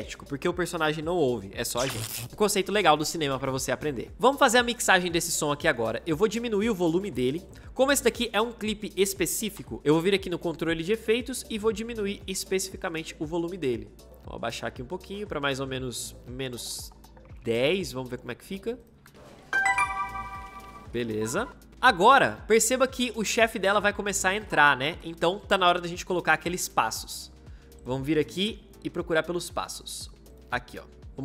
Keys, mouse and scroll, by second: 18.9 space, 21.7 space.